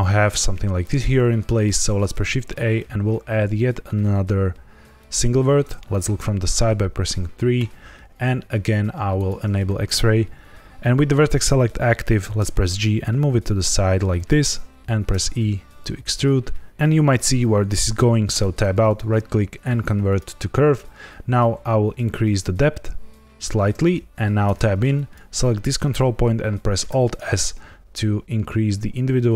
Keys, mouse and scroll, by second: 1.8 shift+a, 5.9 KP_3, 6.6 scroll up 1, 9.1 click, 12.3 g, 14.1 click, 15.0 e, 18.3 Tab, 18.8 right click, 21.5 shift+click, 24.4 Tab, 24.9 click, 26.8 alt+s.